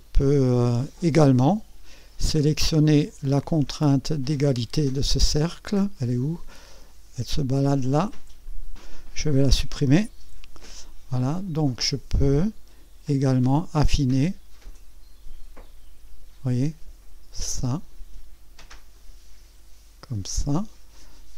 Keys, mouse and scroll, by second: 2.0 scroll up 1, 3.8-4.5 right drag, 5.4-7.7 drag, 8.4 click, 10.2 Delete, 12.2-14.1 drag, 14.7-18.0 drag, 18.9-20.9 drag.